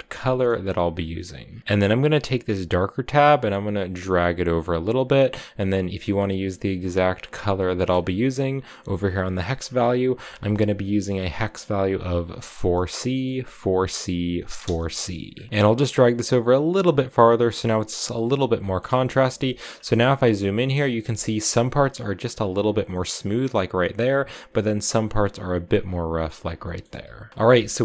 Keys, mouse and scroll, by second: 0.5-1.6 drag, 1.9-5.0 drag, 6.1 click, 15.2 scroll down 2, 15.3 middle click, 15.6-18.4 drag, 18.4 shift+middle click, 18.6-20.7 shift+scroll up 9, 19.3 shift+middle click, 20.7 scroll up 1, 21.0-25.8 shift+middle drag, 25.6-26.3 scroll down 6, 26.4 shift+middle click, 27.3 scroll down 1, 27.4 shift+middle click.